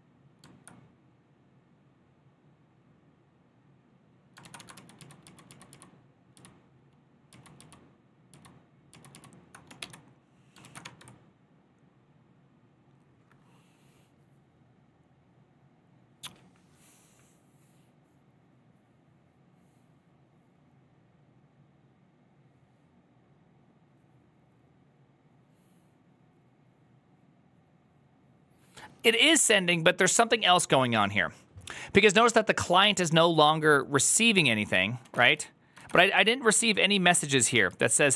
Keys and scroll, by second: 2.0-2.7 typing, 4.3 ctrl+a, 4.6 ctrl+u, 4.6 [, 4.9 ctrl+u, 5.1 ctrl+u, 5.4 ctrl+u, 5.6 ctrl+u, 6.6 ctrl+u, 7.3 ctrl+u, 7.5 ctrl+u, 8.4 ctrl+u, 8.8 ctrl+u, 9.0 ctrl+u, 9.7 shift+g, 10.5 ctrl+a, 10.7 1, 35.4-36.3 typing, 36.5 ctrl+u, 37.0 ctrl+u, 37.8 ctrl+u.